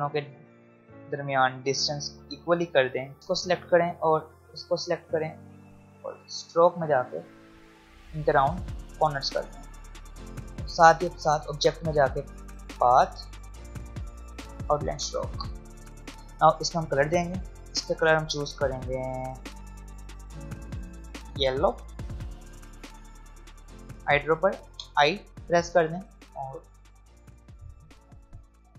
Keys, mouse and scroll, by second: 0.2 click, 11.2 click, 24.7 i, 26.0 click, 27.5 v, 28.0 click.